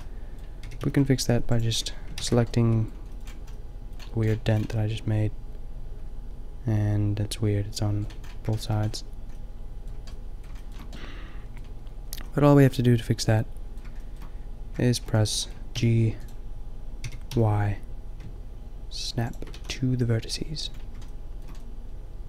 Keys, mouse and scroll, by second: 0.6 g, 2.1 ctrl+z, 2.9 middle click, 8.2-10.4 middle drag, 10.5 middle click, 12.3-13.4 middle drag, 13.7 middle click, 14.9 middle click, 15.7 g, 17.0 g, 19.5 a.